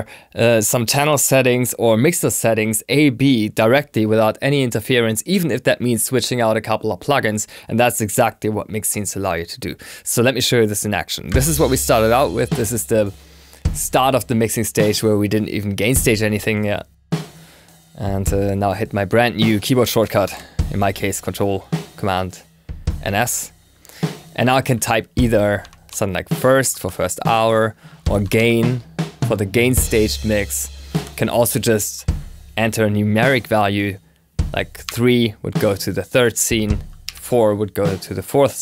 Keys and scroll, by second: 20.1 ctrl+super+s.